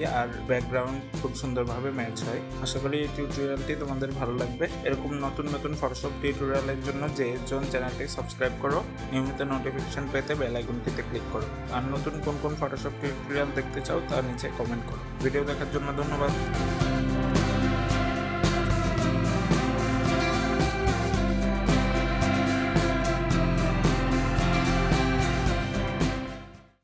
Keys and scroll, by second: 18.1 ctrl+-, 22.3 ctrl+0.